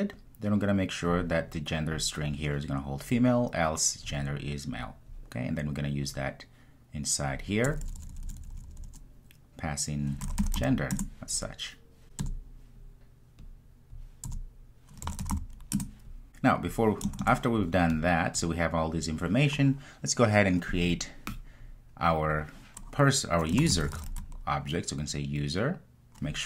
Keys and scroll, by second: 11.0 Return, 15.8 Return.